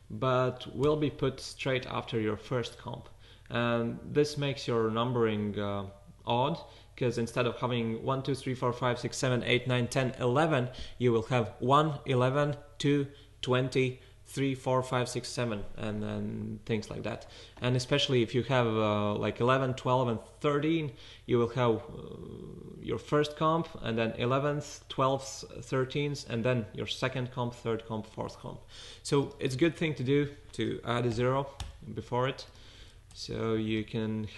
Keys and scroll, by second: 30.4 fn+Left, 31.1 typing, 33.6 fn+Right, 34.0 Left.